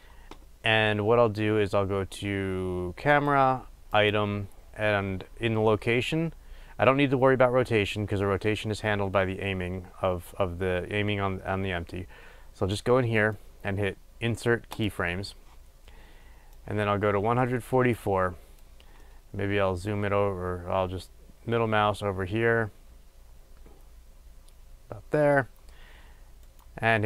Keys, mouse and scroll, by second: 3.4 click, 14.9-16.6 right drag, 16.6-19.1 drag, 19.1-27.0 middle drag.